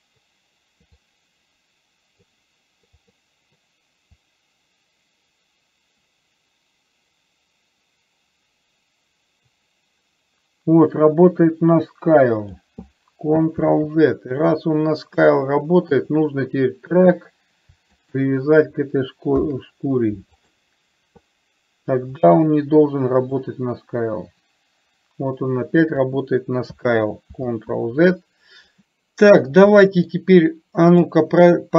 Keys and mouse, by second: 1.2-2.5 drag, 4.5-12.9 drag, 13.9 ctrl+z, 16.2 click, 18.2 shift+click, 19.5 ctrl+p, 23.8-26.3 drag, 27.5 ctrl+z, 28.9 middle click, 29.9 middle click, 31.1 click.